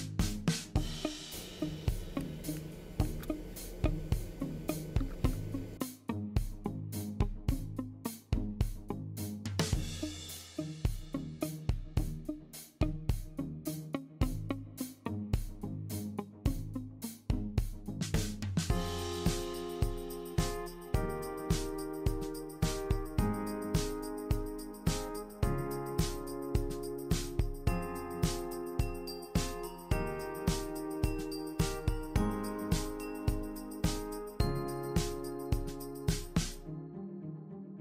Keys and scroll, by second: 14.3 super+c, 14.5 super+v.